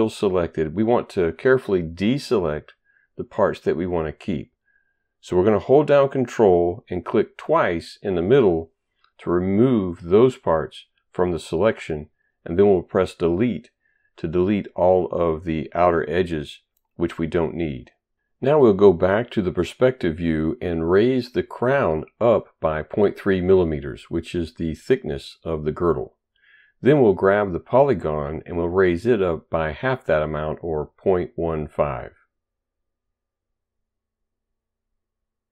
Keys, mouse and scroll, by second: 6.9 ctrl+click, 7.8 ctrl+click, 13.4 Delete, 20.0 click, 21.8 ctrl+right click, 22.6 click, 23.9 click, 25.6-26.4 typing, 27.7 ctrl+right click, 29.0 click, 30.0 click, 31.2 click, 32.4-33.6 typing, 35.0 ctrl+right click, 35.3 ctrl+right click.